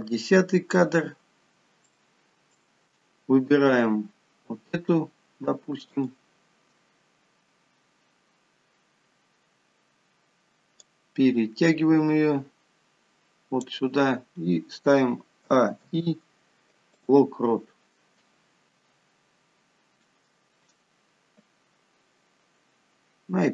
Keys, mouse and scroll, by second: 2.3 shift+middle click, 4.4-5.2 scroll down 1, 6.3 click, 11.3 click, 15.9 a, 16.2 i.